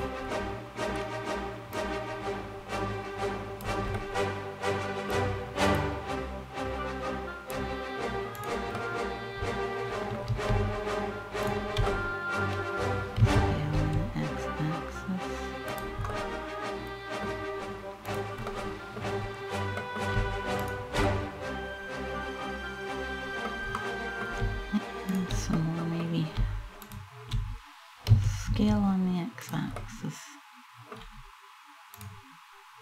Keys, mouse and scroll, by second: 0.0 middle click, 1.4 click, 3.6 middle click, 4.3 middle click, 5.4 click, 8.0 right click, 8.4 middle click, 11.1 shift+right click, 11.5 middle click, 12.8 s, 15.4 click, 15.8 middle click, 17.7 right click, 18.1 middle click, 18.9-19.3 scroll up 1, 19.4 middle click, 20.2 shift+right click, 20.7 middle click, 23.4 middle click, 24.8 shift+right click, 25.2 middle click, 26.4 shift+right click, 27.7 s, 29.1 click, 29.4 middle click, 31.6 right click.